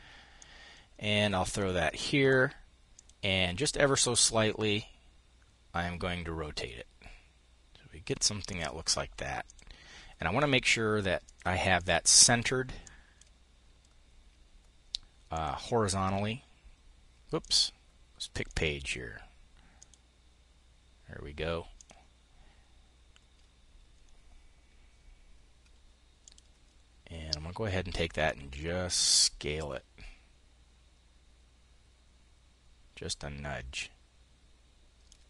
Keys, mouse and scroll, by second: 2.4 click, 3.5-10.8 drag, 11.2 click, 12.2-13.2 drag, 14.8 click, 16.8-18.0 drag, 19.2 click, 21.2 click, 25.6 click, 27.7-35.2 ctrl+shift+drag.